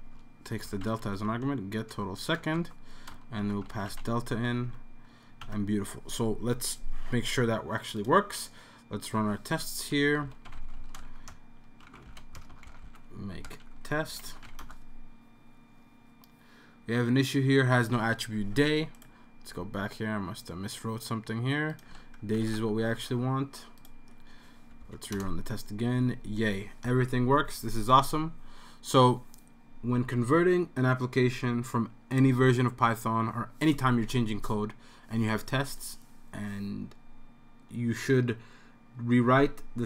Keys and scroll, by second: 0.0-1.4 typing, 2.4 Down, 2.6 Tab, 3.3-4.8 typing, 5.4 super+s, 10.0-13.3 typing, 21.9 s, 22.4 super+s, 24.0 super+s, 24.8 Up, 25.1 Return.